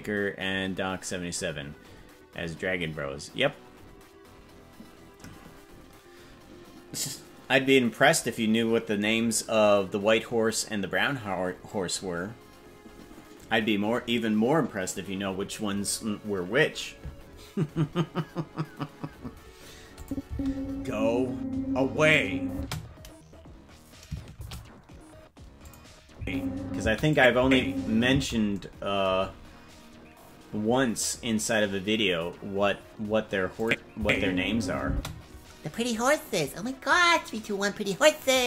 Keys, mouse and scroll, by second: 20.0 click, 20.2 space, 22.5 space, 24.3 shift+d, 26.1 space, 26.8 space, 27.1 click, 27.3 space, 28.1 space, 33.6 click, 33.9 space, 34.8 space.